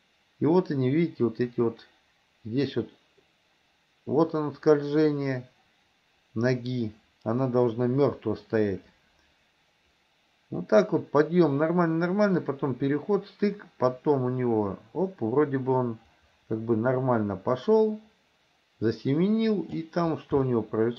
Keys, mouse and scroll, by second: 20.5 shift+middle click.